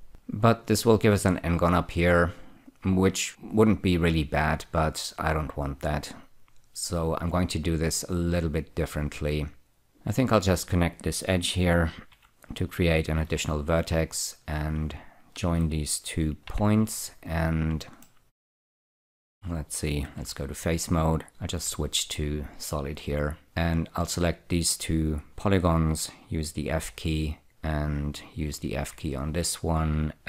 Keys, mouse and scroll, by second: 0.0 click, 9.9 2, 11.1 click, 12.4 <, 13.6 1, 14.6 click, 16.8 j, 18.3 shift+middle click, 20.5 3, 21.9 z, 22.5 click, 23.7 click, 24.0 click, 27.2 f, 27.5 click, 29.1 f.